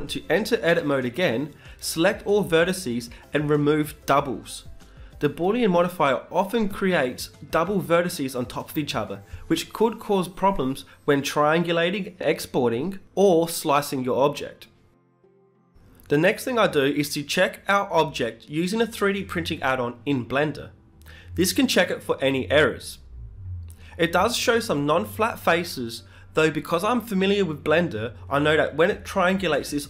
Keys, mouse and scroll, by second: 1.4 w, 15.7 middle click, 16.7 Tab, 17.5 z, 22.2-24.1 drag, 22.8 Tab, 23.6 a, 24.1-28.0 middle drag, 28.0-29.8 drag.